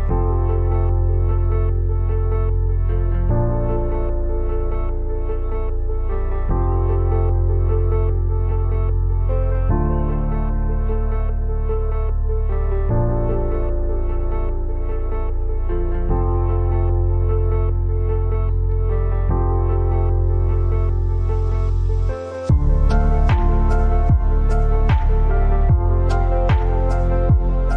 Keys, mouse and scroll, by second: 2.9 click, 7.0 click, 8.6 Left, 9.8 Right, 10.8 click, 12.6 alt+scroll up 1, 13.7-14.3 scroll down 2, 14.4 alt+scroll up 1, 15.0 click, 15.5 t, 15.8-18.9 drag, 21.7 v, 22.2 scroll up 1, 22.7 scroll down 1, 23.2 alt+scroll up 1, 23.6 scroll down 1, 24.6 click.